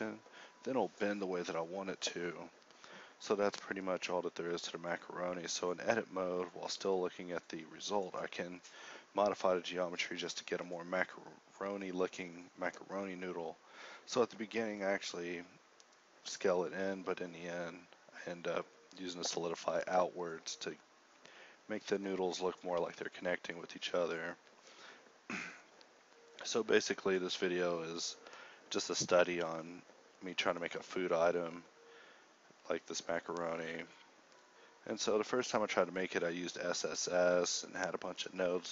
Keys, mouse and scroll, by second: 0.3 middle click, 0.6 KP_4, 0.7 KP_7, 2.7 Tab, 2.9-3.7 typing, 4.7 Tab, 6.4 Tab, 6.4 s, 7.7 ctrl+1, 10.9-12.5 middle drag, 16.3 ctrl+z, 19.9-22.0 typing, 23.1 shift+a, 24.9 g, 25.6 Tab, 26.9 g, 34.3 middle click, 35.7 t, 36.5 b, 36.5 n, 38.3 x, 38.3 s.